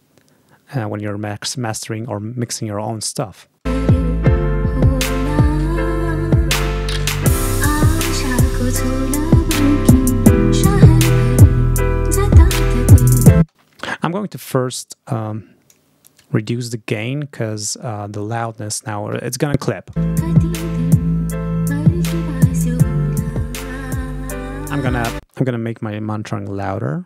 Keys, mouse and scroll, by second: 3.0-3.3 ctrl+scroll up 2, 3.5 space, 7.7-8.9 scroll up 4, 13.2 space, 14.7-15.7 drag, 15.9-18.5 drag, 19.9 space, 22.9 click, 25.0 space.